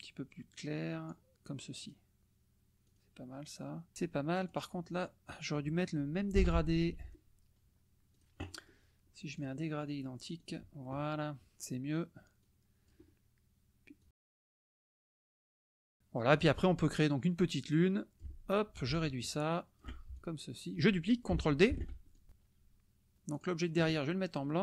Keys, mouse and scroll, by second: 0.5 click, 2.0 click, 3.0 click, 4.4 click, 6.4 g, 8.1 click, 9.4 click, 10.4 click, 12.4 click, 14.0-16.0 drag, 16.4 click, 17.7 click, 19.1-20.0 ctrl+shift+drag, 20.1 ctrl+shift+click, 21.8 ctrl+d, 22.1-23.1 ctrl+drag, 23.3 click.